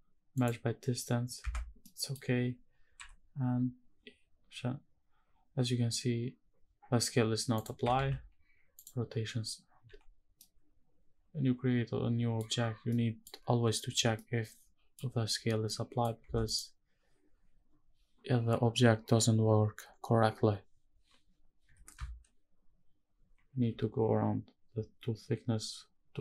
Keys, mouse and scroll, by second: 1.1 Tab, 1.5 middle click, 2.7 n, 7.2 click, 7.7 ctrl+a, 9.5 n, 10.1-12.1 middle drag, 12.6 middle click, 13.7 scroll down 1, 13.9 middle click, 14.8-15.4 scroll up 1, 15.4 middle click, 15.9 Tab, 16.1 click, 21.3 i.